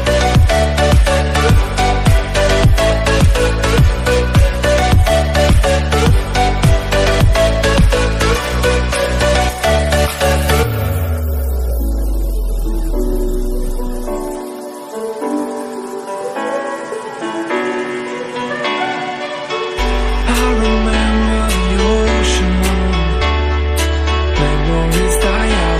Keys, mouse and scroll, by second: 0.4 middle drag, 1.3 click, 3.4 Tab, 3.6-4.4 scroll up 2, 4.4 click, 4.6 click, 5.2 click, 5.7 Tab, 6.0 Tab, 6.2 click, 6.9 alt+click, 7.8 KP_1, 8.6 g, 14.8 ctrl+z, 16.0 g, 21.1 Tab, 21.2-22.9 scroll up 3, 22.9 click, 23.3 click, 23.9 KP_7, 24.6 g.